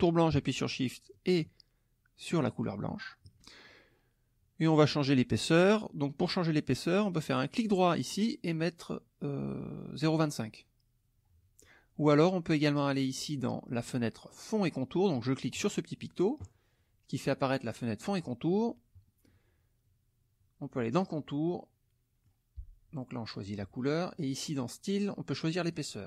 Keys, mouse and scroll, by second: 2.5 shift+click, 7.5 right click, 10.1 click, 15.6 click, 18.0 middle click, 20.9 click, 21.5 middle click, 24.1 click, 25.0 click, 25.5 click.